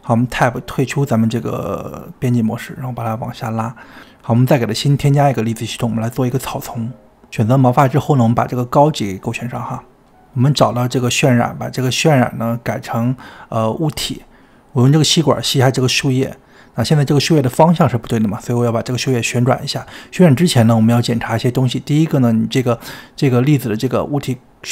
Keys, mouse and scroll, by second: 0.2 Tab, 0.5 middle click, 1.3 click, 1.7 g, 2.5 middle click, 2.8 click, 3.7 scroll down 2, 4.0-5.2 middle drag, 5.2 click, 6.0 shift+middle click, 6.6 click, 7.0-9.6 middle drag, 9.6-11.2 drag, 13.8-15.4 drag, 17.6 click, 19.5 click, 20.9 click, 21.4 click, 24.4-24.7 drag.